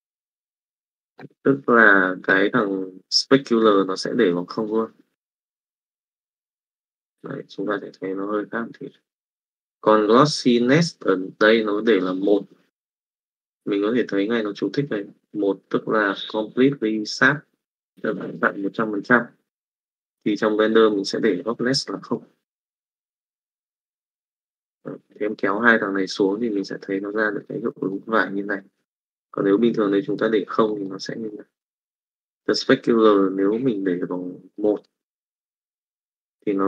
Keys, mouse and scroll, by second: 6.8-9.4 drag, 20.8-22.1 drag, 26.8 middle click, 27.4 middle click, 28.5 click, 29.4 click, 30.8 middle click, 31.5 middle click, 34.5 middle click, 35.4-36.6 middle drag.